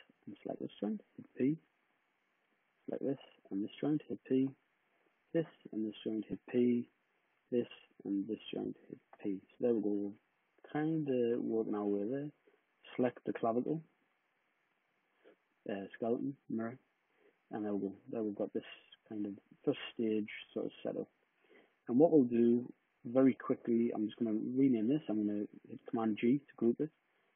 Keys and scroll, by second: 0.9 p, 4.1 p, 6.2 p, 8.8 p, 25.7 super+g.